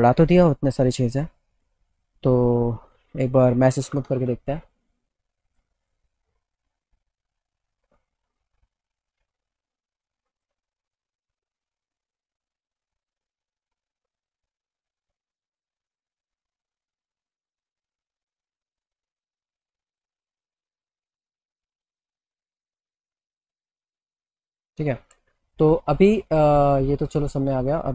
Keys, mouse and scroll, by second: 4.4 m, 5.5 click, 10.3 click, 11.2 click, 12.1 click, 12.8 click, 13.2 middle click, 13.4-14.7 alt+middle drag, 15.0-16.3 middle drag, 16.6 click, 21.0 middle click, 27.4 click.